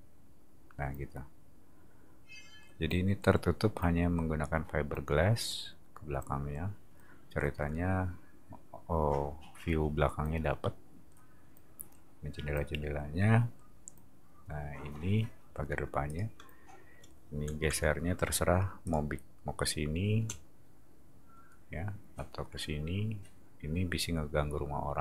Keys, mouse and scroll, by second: 16.1 click, 17.6 m, 18.8 click.